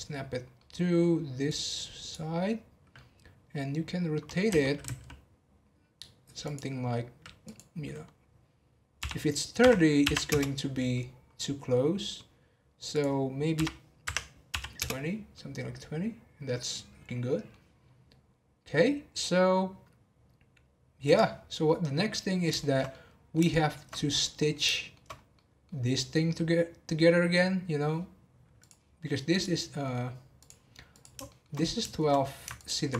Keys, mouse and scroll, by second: 0.5 middle click, 1.5 click, 2.4-3.4 middle drag, 3.4-3.7 scroll down 1, 3.7-4.2 scroll up 1, 4.5 r, 7.4-10.4 drag, 10.9-12.9 middle drag, 12.9-15.3 drag, 15.3-18.3 middle drag, 21.0 click, 21.6-23.9 middle drag, 23.9 scroll up 1, 24.2 middle click, 25.1 scroll up 1, 25.3-28.6 middle drag, 28.6 click, 29.6-30.4 scroll down 1, 30.4 click, 31.2 shift+middle click, 31.5-32.0 scroll down 2, 31.9 shift+middle click, 32.5 ctrl+click.